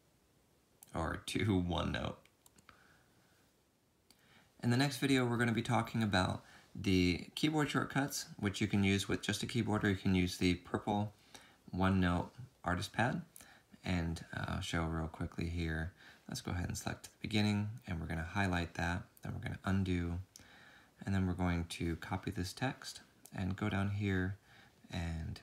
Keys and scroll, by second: 17.0 ctrl+Up, 19.3 ctrl+z, 22.6 ctrl+c.